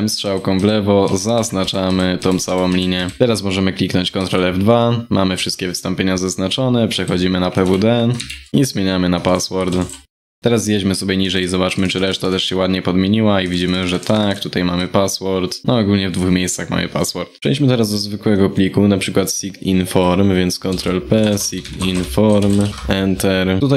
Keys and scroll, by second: 3.8 ctrl+F2, 7.2 ctrl+Right, 7.7 ctrl+Right, 8.3 ctrl+Right, 23.2 ctrl+p.